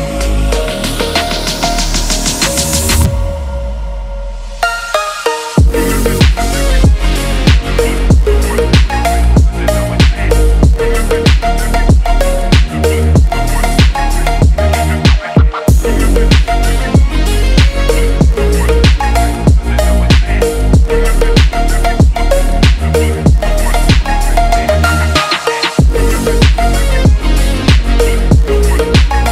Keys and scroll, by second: 5.7 ctrl+z.